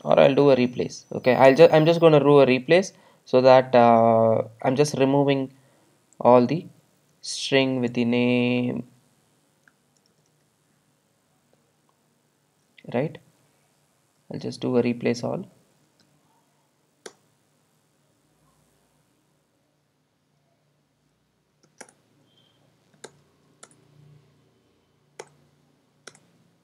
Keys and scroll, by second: 1.5 Return, 17.4 Return, 23.1 alt+Return.